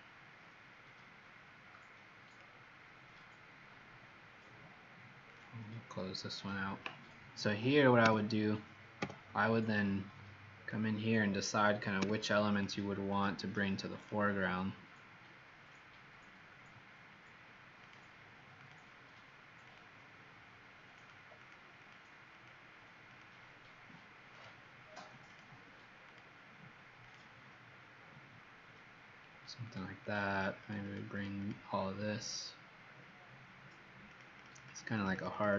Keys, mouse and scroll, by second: 5.2 click, 8.0 l, 8.9 z, 9.6 click, 11.9 l, 12.4 click, 13.1 click, 13.9 click, 21.4 click, 21.7 click, 22.2 click, 23.0 click, 30.1 click, 30.4 click, 30.7 click, 31.1 click, 31.6 click, 34.1 click, 34.4-35.1 click, 34.8 click, 35.4 click.